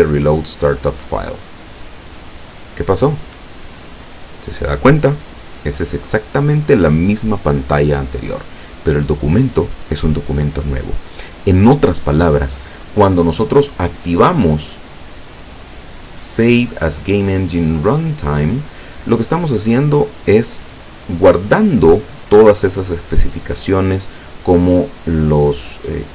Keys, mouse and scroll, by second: 1.3 click, 14.1 click, 19.3 click.